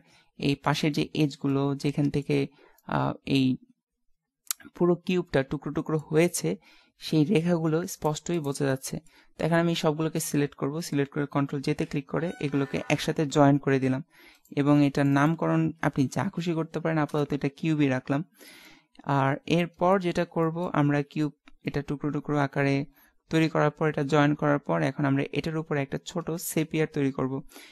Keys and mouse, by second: 1.5 middle click, 3.5-5.4 middle drag, 6.4 middle click, 8.1 right click, 9.4 a, 9.7 a, 11.8 ctrl+j, 14.3 click, 18.6-19.7 middle drag, 20.1-24.3 middle drag, 26.4 shift+a.